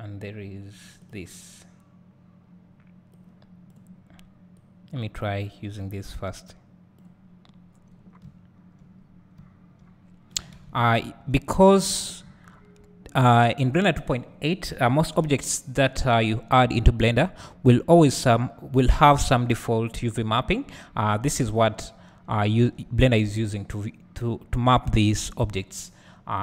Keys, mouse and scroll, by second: 4.5-21.6 drag, 7.9-8.2 scroll up 1, 8.2 `, 8.9 scroll up 1, 9.3 `, 10.0-11.0 scroll down 2, 11.0 `, 22.4 `.